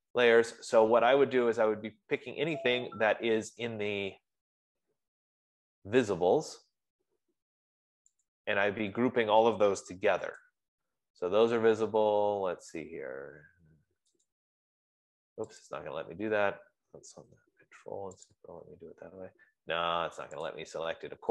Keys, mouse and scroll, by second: 8.7 click, 10.7 shift+click, 15.0 click.